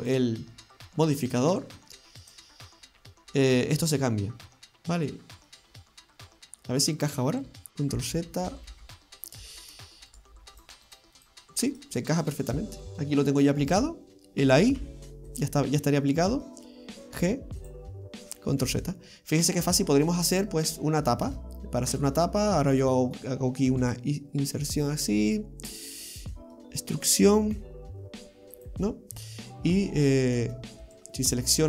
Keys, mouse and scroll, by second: 0.0 click, 2.3 click, 3.9 middle click, 5.7-7.7 scroll up 3, 8.2 ctrl+z, 8.5 ctrl+z, 8.7 ctrl+z, 8.7 ctrl+z, 10.2 right click, 10.6 right click, 10.9 shift+right click, 11.2 shift+right click, 11.7 shift+right click, 12.0 shift+right click, 12.3 shift+right click, 13.1 middle click, 14.8 y, 15.3 click, 15.8 middle click, 17.2 g, 18.7 ctrl+z, 19.3 scroll down 1, 19.6 middle click, 20.3 scroll up 2, 20.8 shift+middle click, 22.2 middle click, 23.8 i, 26.3 middle click, 27.7 e, 29.0 middle click, 29.5 scroll up 1, 30.9 alt+shift+right click.